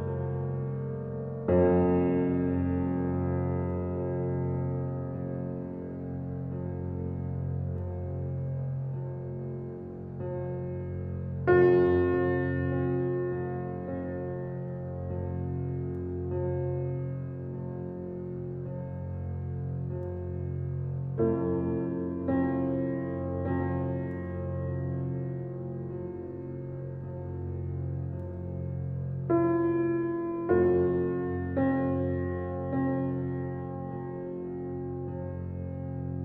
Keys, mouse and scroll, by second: 1.9 shift+d, 5.1 shift+d, 7.5 scroll down 1, 7.7-11.5 middle drag, 11.5-13.2 scroll up 1, 15.1-17.2 middle drag, 17.2 g, 20.4 drag, 20.8 g, 22.3 alt+middle drag, 22.6 alt+middle click, 24.0 r, 26.3 click, 26.8 r, 29.9 alt+middle click, 30.8 click, 31.6 g, 33.4 click, 33.9 g, 35.6-36.1 middle drag, 36.1 click.